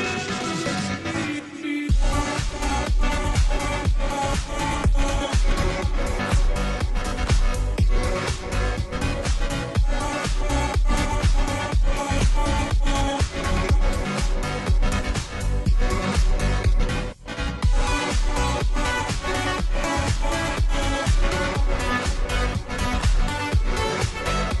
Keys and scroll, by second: 7.6 space, 8.5-14.3 space, 16.0 space, 22.3 space.